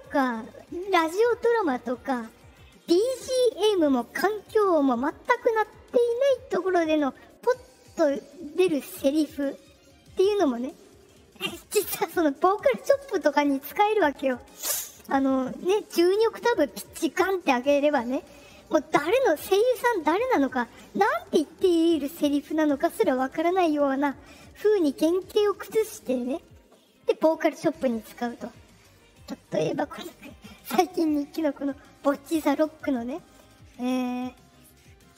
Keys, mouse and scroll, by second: 35.0 click.